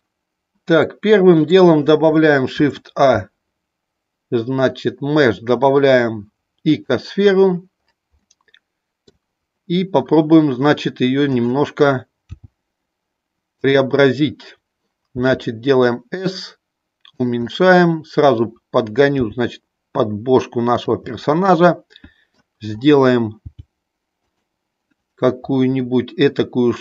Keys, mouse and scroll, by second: 0.7 middle click, 2.7 shift+a, 8.5 middle click, 12.3 g, 13.6 click, 15.2 s, 17.4-17.7 scroll up 1, 17.7 middle click, 19.1 g, 21.0-22.5 middle drag, 23.5 g, 24.2 click.